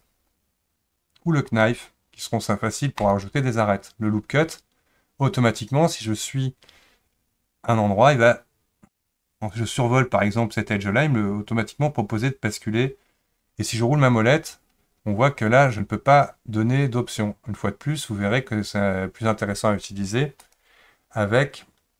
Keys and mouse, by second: 3.0 click, 20.4 click.